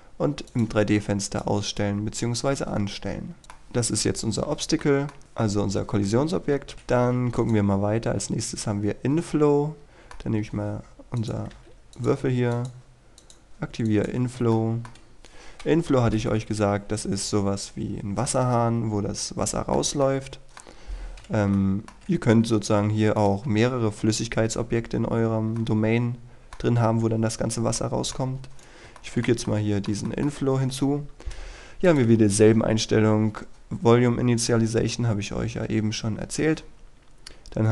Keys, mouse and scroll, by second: 3.4-5.2 middle drag, 7.5 click, 9.8-11.2 middle drag, 11.3 click, 14.6 shift+middle click, 16.8 KP_3, 18.4 middle click, 20.7-21.0 scroll down 1, 21.0-21.6 scroll up 1, 21.6 shift+middle click, 23.3 right click, 25.7-28.3 middle drag, 28.3-28.7 scroll up 1, 28.7 right click, 29.1 shift+middle click, 30.2 shift+middle click, 32.0 click.